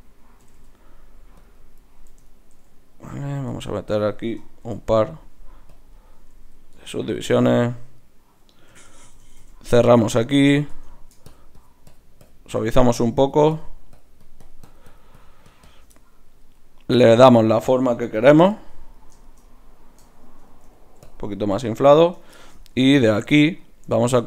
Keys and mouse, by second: 0.4 g, 3.5 ctrl+e, 4.6 ctrl+r, 6.7 ctrl+Tab, 7.6-9.8 drag, 8.7-9.0 f, 9.2 f, 9.4 f, 9.8 f, 10.7 Tab, 11.3-17.4 drag, 17.4-18.5 middle drag, 18.5-20.2 drag, 18.5 right click, 20.2 middle click, 21.0-23.3 drag, 22.0 Tab, 22.9 ctrl+Tab, 23.3 middle click, 23.6-24.2 drag.